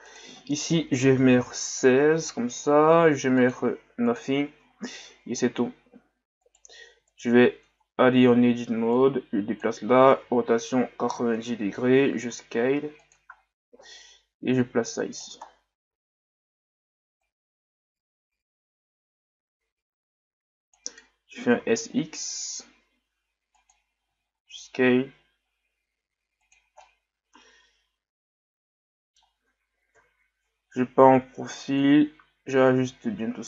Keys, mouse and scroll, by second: 0.1-3.1 drag, 3.4-6.4 drag, 6.4 right click, 7.1 right click, 8.9-10.2 drag, 10.2 r, 13.4-13.8 scroll up 2, 14.6 click, 15.5 scroll down 2, 17.2-20.3 drag, 26.8-29.8 middle drag, 31.8-33.0 drag, 33.0 z, 33.4 scroll down 2.